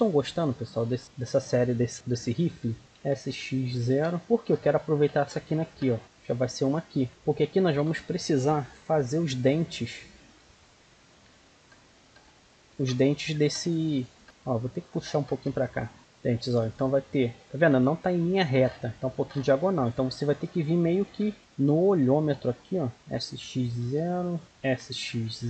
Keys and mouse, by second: 1.1-2.5 drag, 2.8 click, 2.9 s, 6.0 click, 6.6-8.9 middle drag, 9.9-14.2 middle drag, 14.2-15.3 right drag, 15.3 g, 16.0 right click, 16.0 g, 21.0 ctrl+r, 22.9 s, 24.5 s.